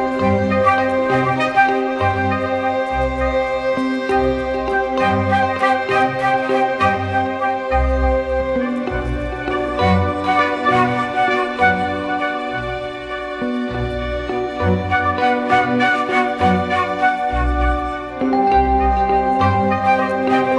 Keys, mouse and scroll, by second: 16.0 double click, 19.9 right click.